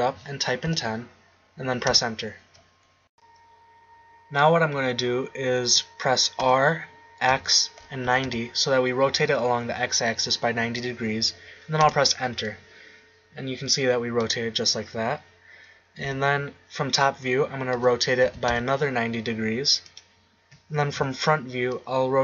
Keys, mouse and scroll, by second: 4.1 middle click, 6.4 r, 16.0 KP_7, 17.7 r, 21.0 KP_1.